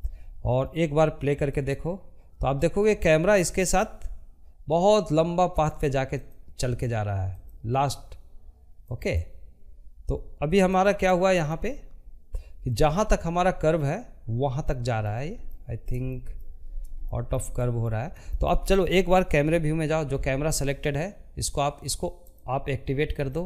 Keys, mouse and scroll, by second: 4.6-9.9 drag, 9.9-12.9 middle drag, 13.9-15.0 shift+middle drag, 15.0-15.4 scroll up 2, 15.5-20.7 shift+middle drag, 20.7 click, 21.7 click.